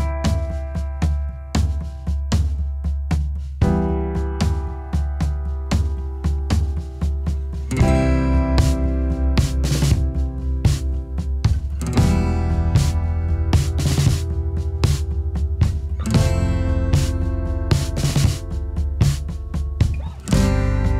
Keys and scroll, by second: 6.6 ctrl+b, 8.9 ctrl+b.